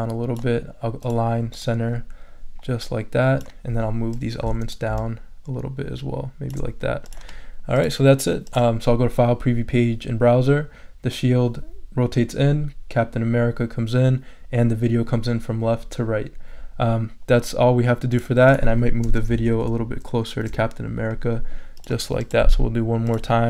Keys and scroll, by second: 19.4 shift+Right.